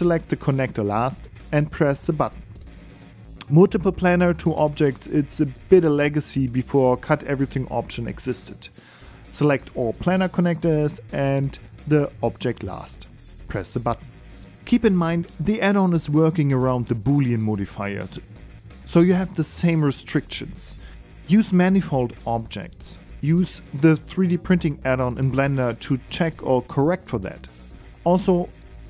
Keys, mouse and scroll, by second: 0.6 shift+right click, 2.8 click, 4.7 right click, 5.1 g, 6.1 shift+middle click, 7.8 shift+middle click, 9.1 right click, 10.0 right click, 10.6 right click, 11.6 shift+right click, 13.0 shift+right click, 14.5 click, 16.2-17.5 scroll down 3, 20.0 right click, 20.9 click, 22.9 click, 23.6 click, 28.4 click.